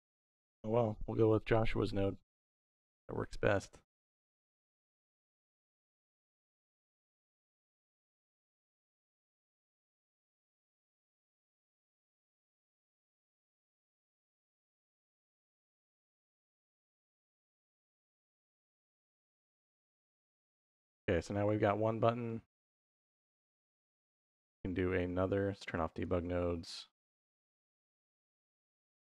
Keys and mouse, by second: 1.0 middle click, 2.2-3.5 drag, 4.1 click, 5.1 x, 5.5 middle click, 6.5 click, 7.4 x, 7.5-8.2 drag, 8.4 x, 9.2 middle click, 10.4-12.9 drag, 13.4 middle click, 14.9-15.9 drag, 16.3 click, 17.1 click, 18.0 middle click, 18.8 click, 20.0 middle click, 21.3 middle click, 22.1 middle click, 23.7 middle click, 25.8 click, 26.6 middle click, 27.0 click, 27.4-28.8 drag.